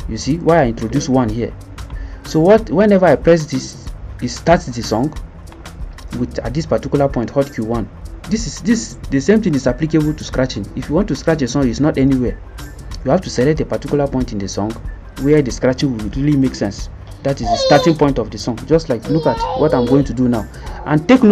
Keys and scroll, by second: 16.4 Tab, 17.5 Tab.